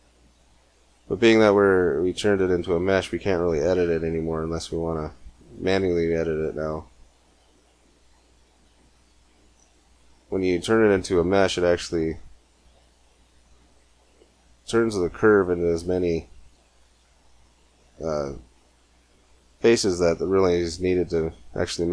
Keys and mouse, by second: 0.4 Tab, 4.3 Tab, 6.1-7.4 right drag, 7.9 g, 10.3-12.2 drag, 13.0 g, 16.4 ctrl+z, 20.1 click, 20.2-21.3 middle drag.